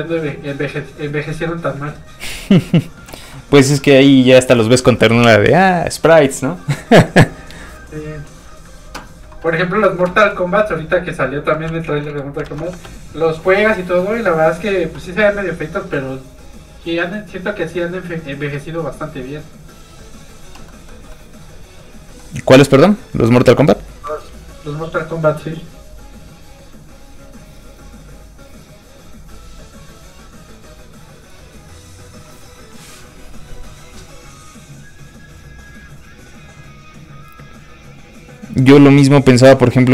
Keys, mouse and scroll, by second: 3.3 shift+middle click, 10.3 middle click, 10.4 middle click, 11.6 alt+shift+middle click, 11.7 alt+shift+z, 12.0 alt+shift+middle click, 12.2 middle click, 12.7 shift+z, 12.8 space, 13.9 click, 20.7 middle click, 23.3 click.